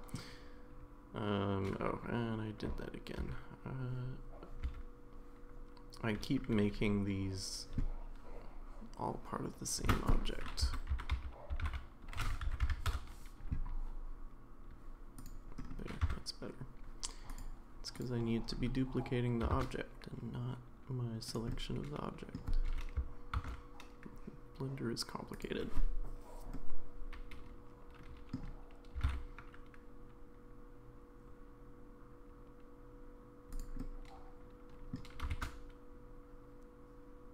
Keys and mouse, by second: 3.2 ctrl+z, 4.6 ctrl+z, 9.9 space, 12.6 Down, 15.2 click, 16.0 Tab, 17.9 click, 19.5 shift+d, 21.5 middle click, 22.6 g, 26.6-28.4 middle drag, 29.0 r, 33.8-34.9 middle drag, 35.1 g.